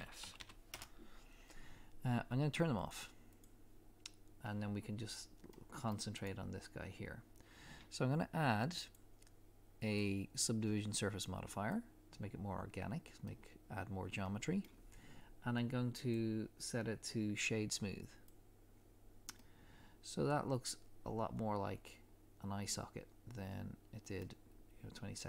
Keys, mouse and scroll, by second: 0.7 Return, 2.8 click, 4.6 scroll up 1, 5.5 middle click, 6.2 click, 13.2 middle click, 18.2 click, 19.4 middle click.